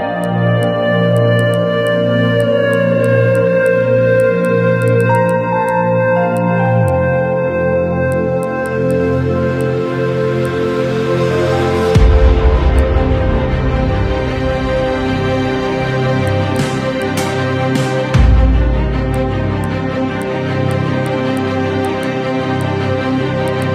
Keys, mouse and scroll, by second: 0.2 click, 1.1 click, 1.5 click, 1.9 drag, 2.4 alt+z, 2.4 click, 3.1 click, 3.7 click, 4.3 ctrl+a, 4.3 scroll down 1, 4.4 click, 4.8 click, 5.1 click, 5.7 click, 6.3 click, 6.5 scroll up 1, 6.9 click, 8.1 click, 8.4-8.8 right drag, 8.9 click, 9.1 scroll down 1, 9.3 KP_1, 9.7 click, 9.7 scroll down 1, 9.9 Tab, 10.3 1, 10.5 click, 10.7 a, 10.9 KP_1, 11.2 ctrl+shift+b, 13.5 ctrl+shift+b, 16.5 Tab, 16.5 click, 16.9 scroll up 1, 17.0 click, 17.3 Tab, 17.9 ctrl+z, 18.1 ctrl+shift+b, 19.3 KP_1, 19.4 Tab, 19.6 click, 19.6 scroll down 2, 20.2 click, 20.5 scroll up 3, 20.7 click, 21.0 click, 21.4 click, 21.9 click, 22.6 click, 23.5 click.